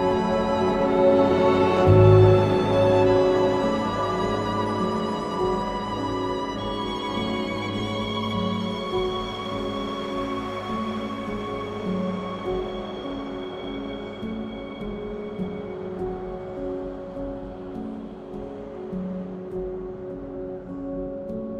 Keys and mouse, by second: 1.5 Tab, 4.6 3, 4.7 click, 5.5 ctrl+KP_1, 7.9 shift+d, 9.7 click, 11.7 ctrl+KP_1, 12.3 1, 14.2 s, 15.7 click, 16.4 r, 18.2 click, 18.6 g, 19.3 z, 20.0 click, 21.0 2, 21.3 click.